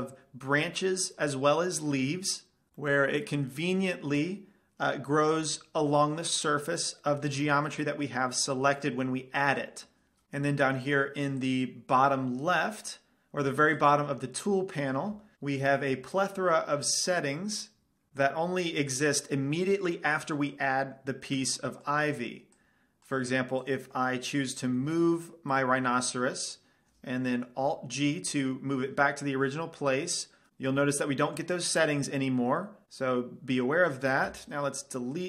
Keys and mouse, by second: 1.0-2.7 middle drag, 7.2-10.2 middle drag, 11.7-13.5 drag, 13.9-15.3 drag, 16.4-18.1 middle drag, 20.7-22.7 drag, 22.8-25.7 drag, 25.0 g, 25.9-27.8 drag, 28.3 alt+g, 30.5-32.8 drag, 34.5 x.